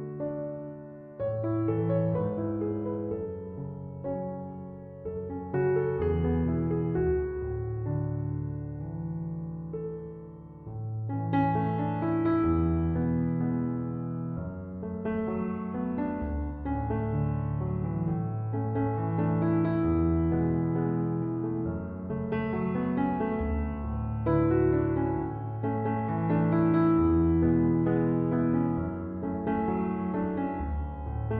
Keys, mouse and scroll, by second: 9.4 1, 9.8 Return.